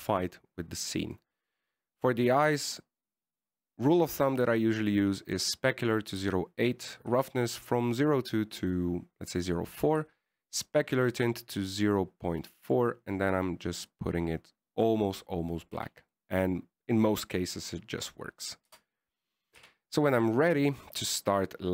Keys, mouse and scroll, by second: 2.3 right click, 3.5 middle click, 4.0-5.3 scroll up 1, 5.3 scroll up 2, 5.6 click, 7.4 click, 10.8 click, 13.8 click, 16.8 scroll down 3, 17.0 a, 17.4 middle click, 18.3-19.8 scroll down 1, 19.9 KP_0, 20.8 KP_1.